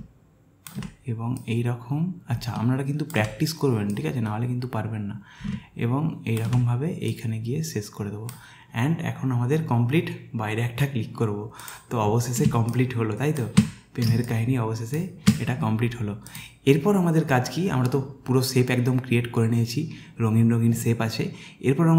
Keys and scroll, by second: 12.5 space, 14.1 space.